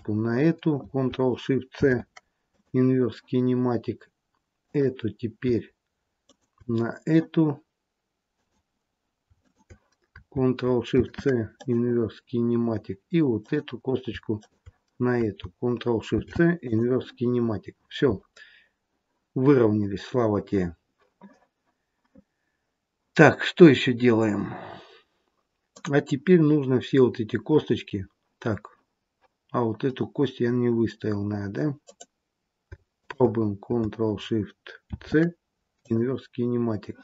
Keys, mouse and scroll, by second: 1.6 ctrl+shift+c, 4.6 click, 6.1 shift+click, 8.2 click, 9.3 click, 10.8 ctrl+shift+c, 13.4 click, 14.3 shift+click, 16.0 ctrl+shift+c, 18.3-19.1 scroll down 2, 19.1-19.8 scroll down 1, 19.8-21.6 scroll up 1, 21.6-22.9 scroll up 1, 25.7 click, 27.5-28.6 scroll down 2, 29.9-30.4 scroll up 3, 30.4-31.7 scroll down 2, 31.7 click, 33.0 shift+click, 34.7 ctrl+shift+c.